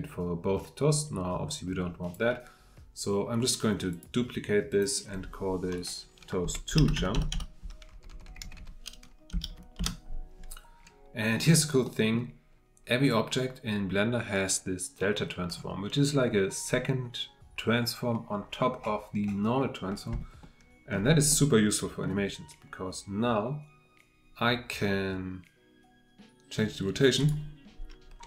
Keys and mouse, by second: 6.9 BackSpace, 8.1 Left, 11.4-11.8 middle drag, 11.8-20.5 drag, 20.5-22.0 shift+middle drag.